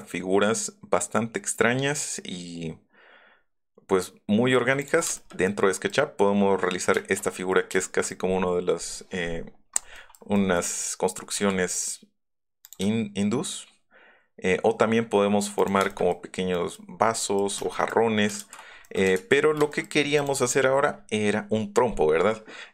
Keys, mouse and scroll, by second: 5.2 space, 5.9-6.9 middle drag, 10.1 middle click, 11.3 s, 12.6 click, 14.3 ctrl+middle click, 14.3 ctrl+scroll, 15.6 ctrl+click, 15.8 click, 15.8 space, 19.1 ctrl+z, 20.2 click.